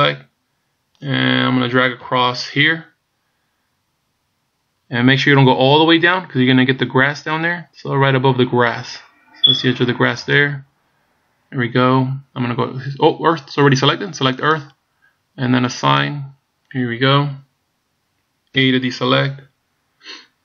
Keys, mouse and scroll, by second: 2.1 b, 14.5 click, 15.9 click, 18.7 a.